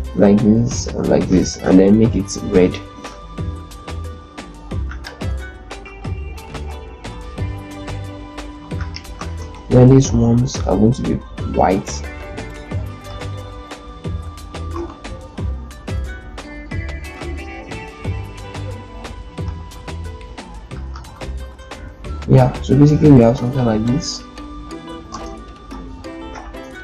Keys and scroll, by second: 0.5 ctrl+shift+d, 8.4 shift+z, 9.4 ctrl+space, 12.3 ctrl+g, 14.4 ctrl+g, 14.6 ctrl+F4, 24.9 ctrl+space.